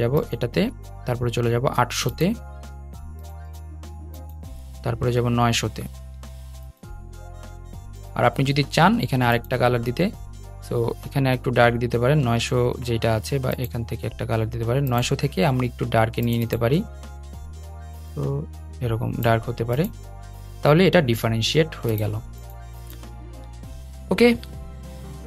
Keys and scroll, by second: 24.9 super+z.